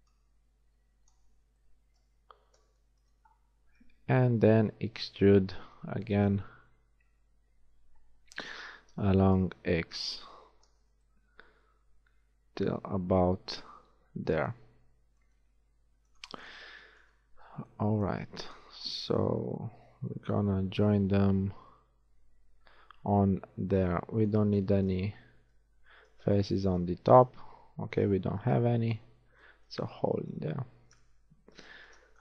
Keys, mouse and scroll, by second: 0.2 middle click, 0.5-2.0 drag, 1.8 middle click, 4.7 shift+e, 11.0 shift+z, 14.7-18.2 middle drag, 18.6 KP_1, 19.1 z, 23.8 z, 31.1 KP_1.